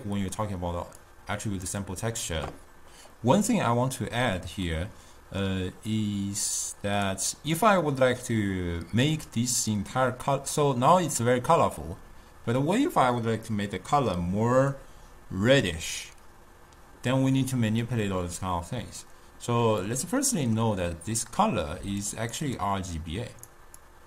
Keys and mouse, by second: 1.6 click, 5.1 middle click, 6.0 click, 20.1-22.0 middle drag, 22.0 d, 22.4 click, 22.6 d, 22.8 click, 23.7 d.